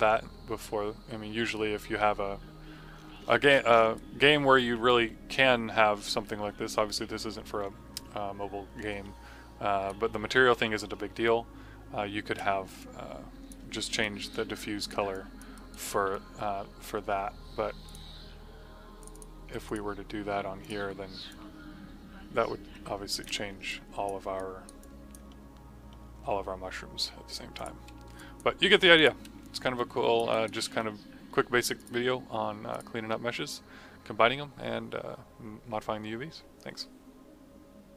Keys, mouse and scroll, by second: 2.8 scroll down 1, 3.9 right click, 4.5-8.8 typing, 12.7 click, 13.5 f, 13.9 alt+right click, 15.0 click, 15.5 right click, 17.8 click, 24.3 right click, 24.5-24.8 typing, 24.8 click, 25.2 middle click, 27.5 click, 30.2 right click, 31.7 click.